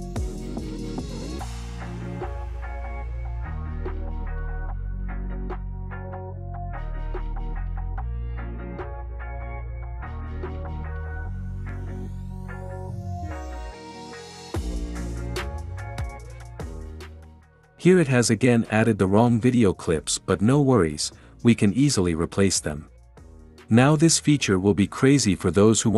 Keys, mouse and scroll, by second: 5.1 click, 5.7 drag, 6.1 click, 20.7 space.